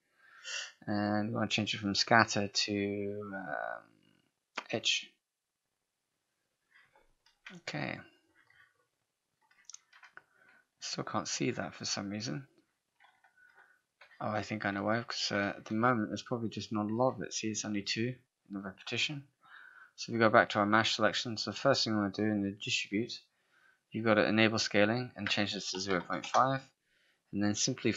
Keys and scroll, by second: 26.3 Return.